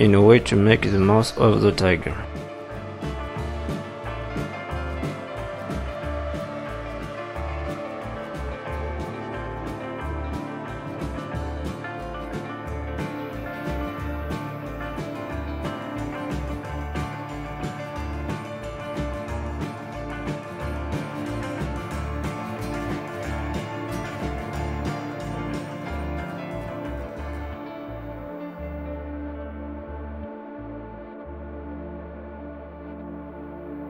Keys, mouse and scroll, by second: 6.7 middle click, 8.1 click, 8.7 middle click, 9.6 click, 11.4 middle click, 12.4 click, 13.4 middle click, 14.2 click, 15.1 middle click, 16.2 click, 17.3 middle click, 18.1 click, 18.8 middle click, 19.9 e, 20.7 g, 22.4 middle click, 25.0 middle click, 25.0 scroll down 3, 26.5 middle click, 26.5 scroll up 3, 27.8 scroll up 2, 28.0 middle click, 29.3 s, 30.8 middle click, 31.7 scroll down 2, 31.9 middle click, 32.3 scroll up 2, 32.6 middle click, 33.4-33.8 scroll up 1.